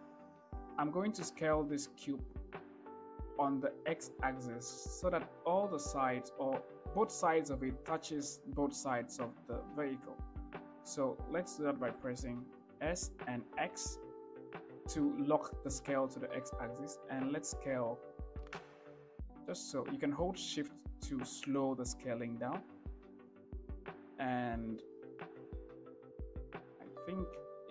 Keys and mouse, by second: 0.2 shift+middle click, 12.4 s, 13.2 x, 20.1-27.7 shift+middle drag.